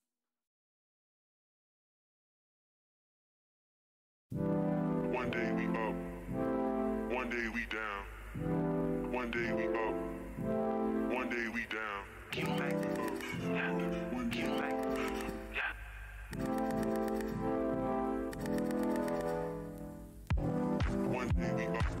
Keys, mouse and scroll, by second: 6.9 click, 7.0 f, 7.6 alt+click, 7.7 alt+scroll down 1, 8.2 e, 8.9 click, 9.9-11.4 typing, 10.6 alt+click, 11.6 click, 13.3 e, 14.0 click, 16.1 click, 16.2 shift+d, 16.7 alt+scroll down 1, 17.2 alt+w, 18.0 z, 19.1 alt+z, 20.4 click.